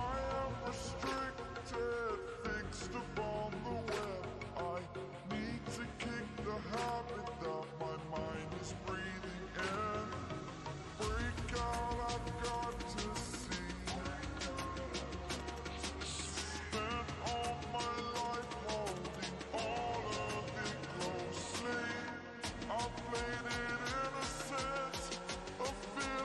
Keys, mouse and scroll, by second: 14.9 click, 17.8 click, 18.2 ctrl+space, 18.4 ctrl+click, 18.6-18.9 ctrl+space, 19.5-20.8 drag, 24.4 ctrl+space, 24.6 ctrl+click, 24.8-25.3 ctrl+space, 25.6-26.1 click.